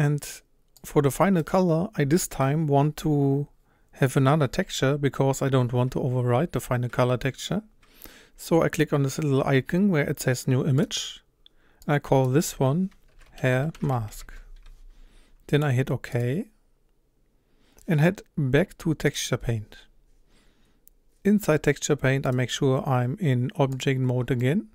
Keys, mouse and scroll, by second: 0.6 scroll up 1, 16.1 click, 19.1-22.0 drag, 23.8-24.4 drag, 24.4-24.7 middle drag.